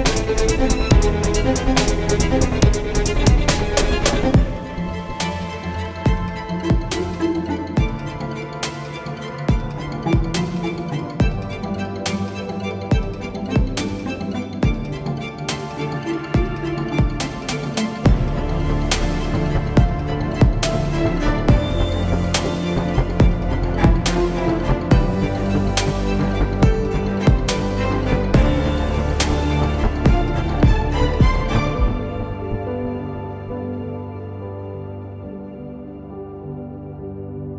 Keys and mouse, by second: 1.5-3.0 middle drag, 3.0 KP_1, 8.6 z, 29.5 KP_0, 31.8 ctrl+z.